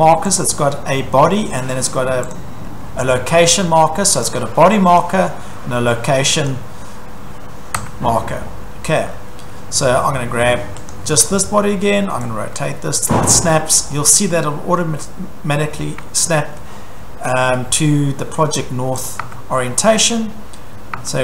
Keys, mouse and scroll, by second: 0.4 click, 1.4 Escape, 2.3 click, 4.2 Escape, 5.0 click, 5.4 Escape, 6.5 click, 7.8 Escape, 8.1-9.4 scroll, 9.4 Escape, 10.1 scroll, 10.9 click, 11.3 scroll, 13.2 click, 13.8 scroll, 14.9 scroll, 18.5-19.1 scroll, 19.1 click, 19.2 Escape, 20.1 click, 21.0 Escape.